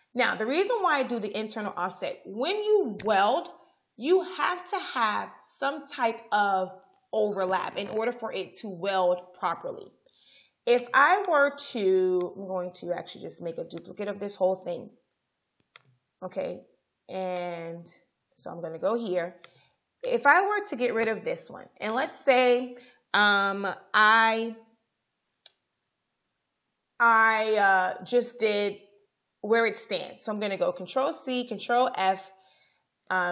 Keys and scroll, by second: 20.7 Delete, 31.1 ctrl+c, 31.6 ctrl+f.